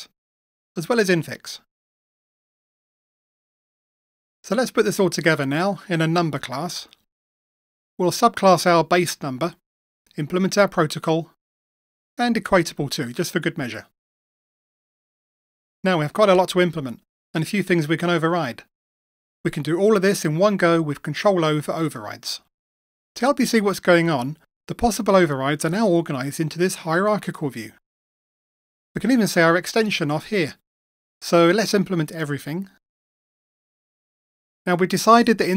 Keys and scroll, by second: 1.5 Return, 2.4 Return, 3.1 Return, 8.8 Return, 11.3 Return, 13.9 Return, 33.5 ctrl+o, 33.7 ctrl+o.